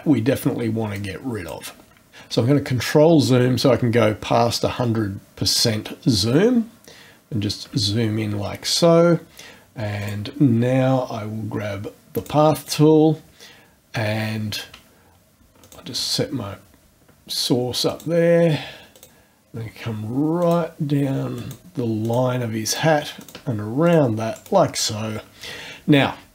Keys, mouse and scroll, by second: 0.1-0.4 scroll up 1, 0.9 click, 2.3-3.1 ctrl+scroll up 4, 3.8 ctrl+scroll up 2, 4.4 ctrl+scroll up 2, 5.3 ctrl+scroll up 2, 5.9 ctrl+scroll up 2, 6.5 ctrl+scroll up 2, 10.0 click, 12.2 click, 15.6 shift+click, 17.9 ctrl+click, 18.9 ctrl+click, 20.4 ctrl+click, 21.4 ctrl+click, 22.0 ctrl+click, 22.7 ctrl+click, 23.2 ctrl+click, 23.8 ctrl+click, 24.3 ctrl+right click.